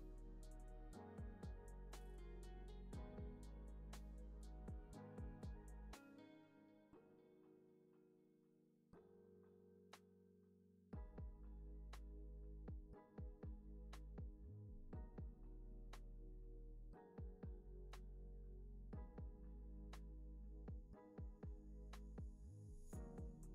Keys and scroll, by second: 1.8 z, 14.3 p, 16.3 x.